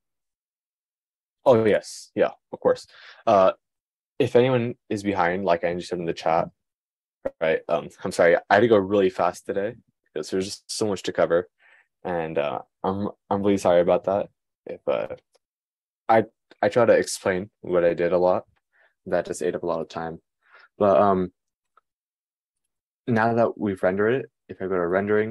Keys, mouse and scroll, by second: 23.3 click.